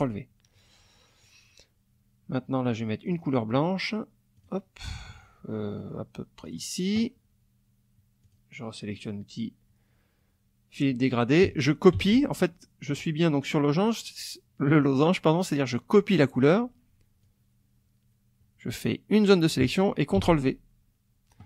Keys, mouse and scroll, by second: 3.0 click, 4.4 click, 6.4 click, 8.2 click, 11.9 ctrl+c, 12.9 click, 17.2-19.4 drag, 20.2 ctrl+v.